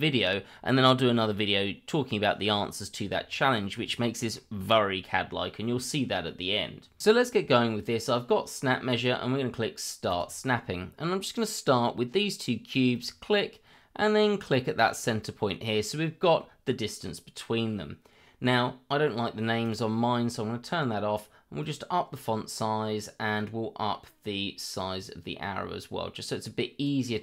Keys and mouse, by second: 3.4-3.7 shift+middle drag, 3.9 middle click, 10.1 click, 12.9 click, 14.7 click, 15.3-16.4 middle drag, 19.6 click, 21.6-23.4 drag, 24.8-26.8 drag.